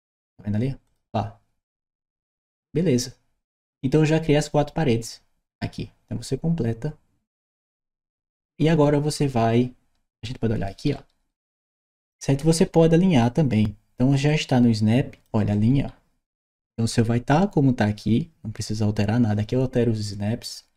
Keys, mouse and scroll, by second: 0.7 click, 7.1 click, 10.1-13.0 right drag, 11.0 w, 12.1 w, 14.1 click, 15.4-16.7 right drag.